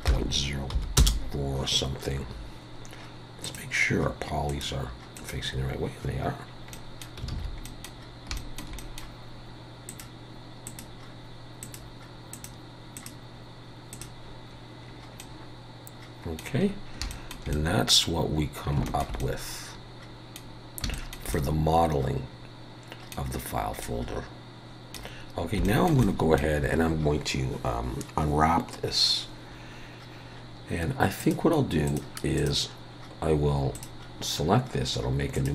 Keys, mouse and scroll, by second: 3.4 click, 6.4 scroll down 2, 6.7 middle click, 7.0 scroll up 1, 7.3 alt+a, 7.6 middle click, 8.0 scroll down 2, 8.4 shift+middle click, 8.8 middle click, 9.9 click, 10.7 click, 14.9 scroll down 2, 15.2 middle click, 16.6 scroll up 3, 17.1 shift+middle click, 17.5 middle click, 18.3 scroll down 1, 18.9 shift+middle click, 19.2 middle click, 20.5 scroll down 1, 20.9 shift+middle click, 23.6 scroll up 1, 23.8 middle click, 25.3 scroll down 1, 25.6 shift+middle click, 26.0 middle click, 31.2 click, 31.9 click, 33.7 click, 35.3-35.5 click.